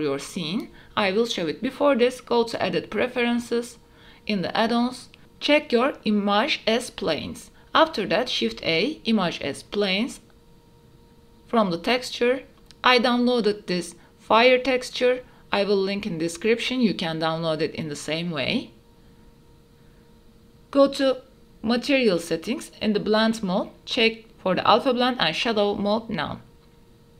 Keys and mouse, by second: 0.3-1.3 drag, 7.7 shift+a, 15.5 middle click, 16.3-17.7 typing, 18.3 shift+middle click, 18.5 middle click, 22.8-24.4 drag, 24.9-26.3 drag.